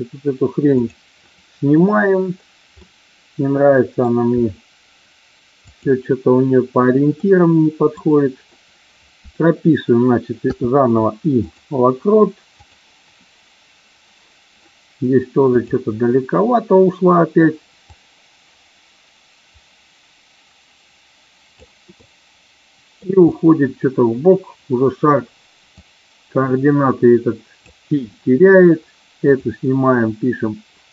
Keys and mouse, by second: 0.8 click, 2.8-4.0 middle drag, 5.5 click, 7.1-7.9 middle drag, 12.5 click, 15.5 click, 17.9-21.5 drag, 21.9-22.9 middle drag, 25.6-27.5 drag, 29.3 click.